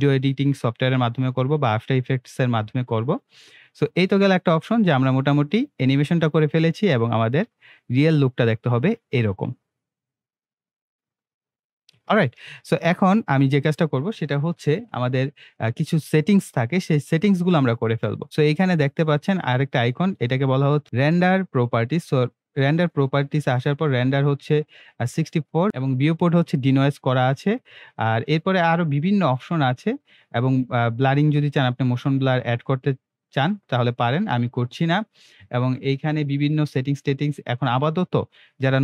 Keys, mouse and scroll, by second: 12.0 space, 13.4-16.5 drag.